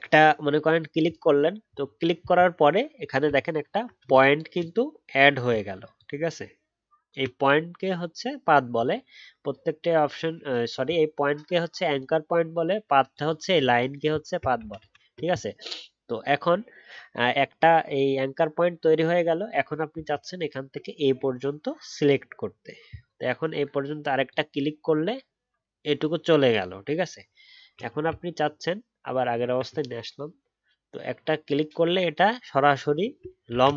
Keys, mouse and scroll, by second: 3.2-3.6 alt+scroll up 2, 5.9 ctrl+click, 14.8 ctrl+z, 20.0-20.3 alt+scroll down 1, 33.5 ctrl+z.